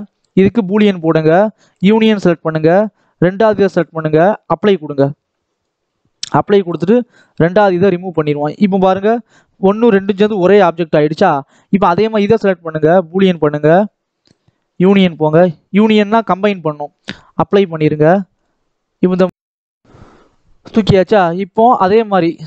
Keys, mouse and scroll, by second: 1.0 click, 2.4 click, 4.4-6.6 drag, 7.1 x, 8.0 click, 9.0 Tab, 9.8 alt+a, 10.3 l, 10.9 Tab, 11.4 alt+a, 11.7 click, 13.4-14.7 drag, 15.1 click, 17.4 click, 21.7 click.